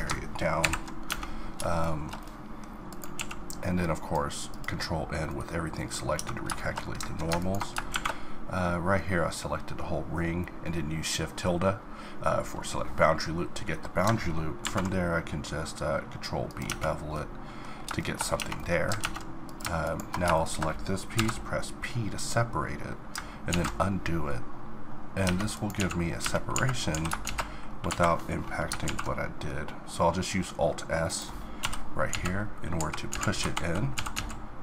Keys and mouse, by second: 0.6 ctrl+n, 1.1 Tab, 2.1 middle click, 3.2 q, 4.8 middle click, 6.2 Tab, 7.4 click, 8.9 click, 9.4-14.6 middle drag, 14.6 ctrl+b, 15.6-16.6 middle drag, 16.6 Tab, 17.7 middle click, 18.3 Tab, 19.0 ctrl+Tab, 21.1 p, 23.5 ctrl+z, 25.2 Tab, 25.8 z, 26.2 Tab, 26.5 a, 26.9 s, 28.8 alt+s, 31.6 ,, 32.1 z, 33.9 s.